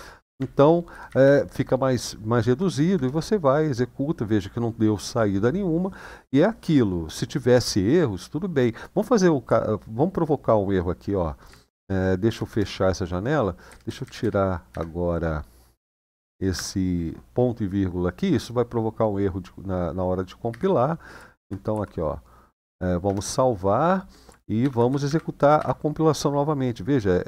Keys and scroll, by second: 0.1 Left, 0.3 Left, 0.6 Left, 0.8 Left, 1.0-2.2 Left, 2.5 Left, 2.7 Return, 11.5 shift+;, 12.0 q, 12.2 Return, 13.4 Down, 13.6 Down, 13.8 Down, 13.9 Down, 14.5 End, 16.3 typing, 20.3 Escape, 21.1-21.5 typing, 22.8 Return, 24.4 typing, 24.6 Up, 24.8 Up, 25.3 Up.